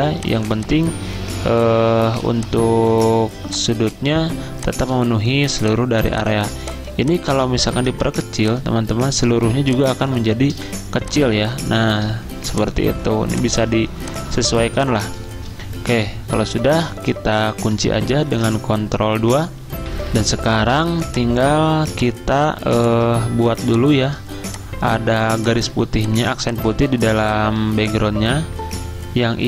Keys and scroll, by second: 0.4 z, 9.6 z, 12.2-12.9 typing, 14.7 space, 15.8 v, 18.4 ctrl+2, 21.0 F10, 21.0 space, 22.6 z, 26.4 typing, 27.6 r.